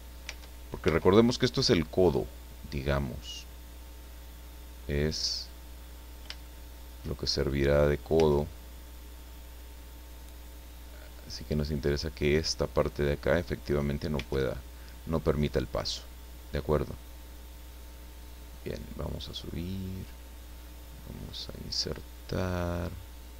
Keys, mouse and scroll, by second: 0.2 Tab, 1.8-3.4 drag, 4.0-5.6 drag, 5.8-6.2 scroll up 1, 6.4 shift+middle click, 7.4 shift+middle click, 8.1 Tab, 8.5 middle click, 8.6 scroll up 2, 11.1-11.4 scroll up 2, 14.1 Tab, 16.0-18.4 drag, 19.2-21.6 drag, 21.8-23.0 middle drag.